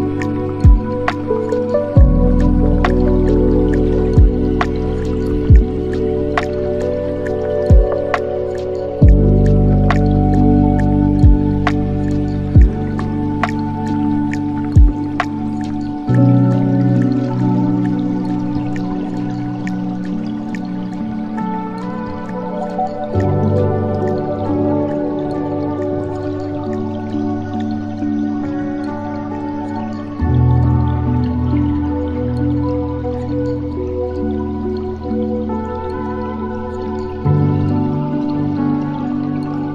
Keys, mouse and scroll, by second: 3.7 space, 4.8 click, 6.7 click, 8.1-8.8 scroll up 6, 10.7-12.0 drag, 13.0 click, 16.0-19.3 right drag, 20.8-24.1 drag, 24.1 KP_0, 24.5 KP_0, 26.2-32.0 drag, 33.2 scroll down 2, 34.6-37.7 drag, 38.0-39.7 drag.